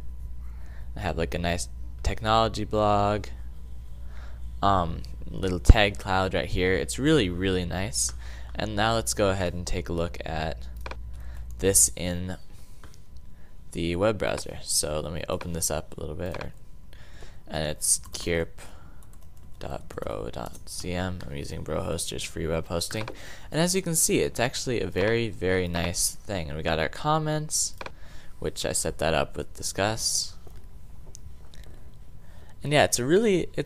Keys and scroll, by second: 17.8-20.7 typing.